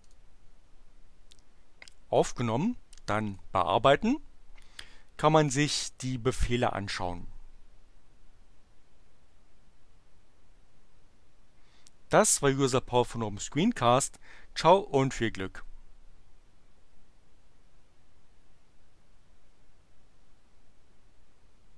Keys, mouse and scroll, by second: 0.0 click, 2.2 click, 3.3 click.